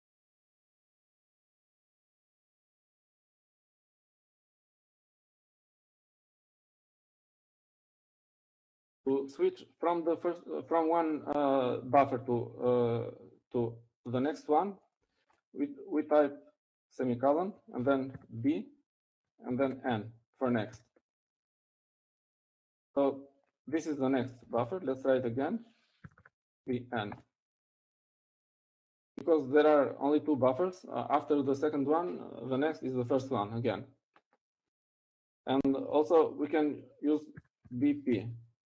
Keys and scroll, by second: 19.6 shift+;, 21.7-22.2 typing, 27.2 typing, 28.7-29.1 typing.